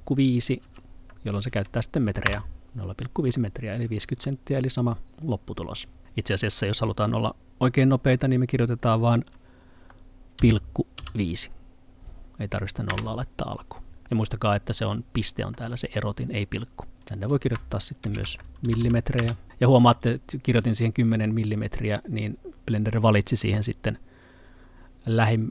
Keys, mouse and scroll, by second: 0.7 typing, 2.3 Return, 6.0 click, 11.0 typing, 12.9 Return, 16.9 click, 18.0-18.8 typing, 19.2 Return, 19.5 click.